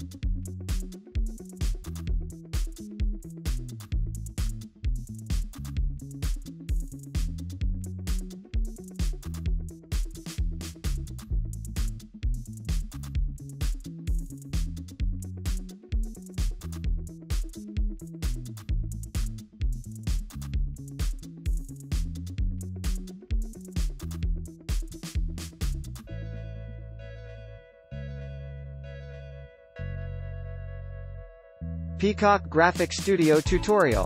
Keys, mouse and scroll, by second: 1.3 alt+click, 4.5 alt+click, 6.5 scroll down 1, 7.1-9.1 scroll up 1, 9.6 alt+click, 11.8 scroll down 1, 12.7 right click, 15.3-15.7 scroll up 1, 20.1 alt+click, 20.7 alt+click, 24.3 alt+click, 25.1 alt+click, 28.4 scroll down 1.